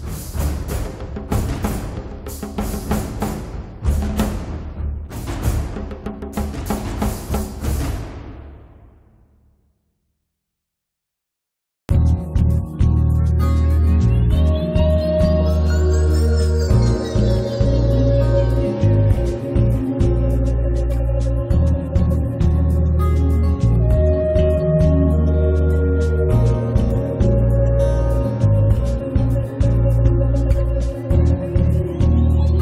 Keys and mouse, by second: 0.3 middle click, 0.5-1.6 drag, 1.6 middle click, 2.1 click, 2.7 middle click, 3.3 click, 3.8-5.6 middle drag, 4.4 click, 4.7 f, 5.2-6.5 drag, 5.9-9.2 middle drag, 9.7-11.8 drag, 11.8 right click, 11.9 click, 11.9-13.5 middle drag, 13.0 click, 13.0 right click, 13.6 middle click, 13.6 right click, 13.9 middle click, 14.4-16.1 drag, 16.1-18.2 middle drag, 17.5 a, 18.4 click, 20.1 middle click, 20.7 ctrl+s, 22.1 click, 22.5 alt+F3, 22.5-26.0 middle drag, 26.0-26.3 d, 26.3 click, 26.9 d, 27.8 click, 28.4 right click, 29.0 click, 29.3 click, 29.7 middle click, 30.4 z, 30.6 click, 30.6 right click, 31.0 z, 31.3-32.5 middle drag.